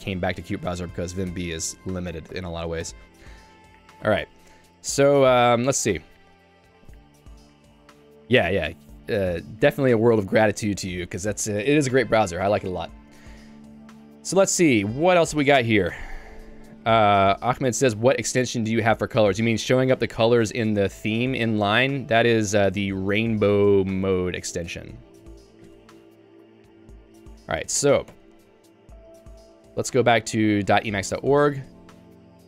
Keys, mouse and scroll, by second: 0.8 super+e, 1.3 Escape, 2.4 h, 2.9 h, 4.0 j, 4.2 j, 20.5-22.4 typing, 25.6 ctrl+g, 26.1-29.0 typing, 31.5 Return.